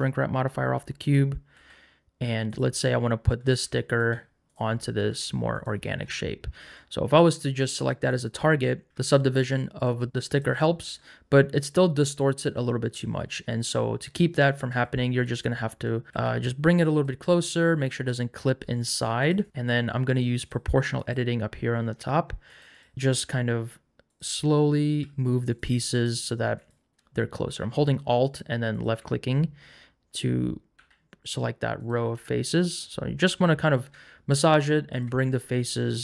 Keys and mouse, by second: 1.5 g, 2.5 click, 3.5 r, 3.9 click, 4.0 s, 5.1 g, 7.6 click, 8.9 Tab, 8.9 a, 10.1 shift+click, 14.7 Tab, 15.2 click, 16.1 l, 16.1 g, 16.9 click, 19.2 alt+click, 20.4 click, 21.0 click, 22.6 click, 23.2 g, 24.1 click, 26.0 click, 26.7 alt+click, 30.7 g, 31.8 click, 32.0 r, 32.7 click.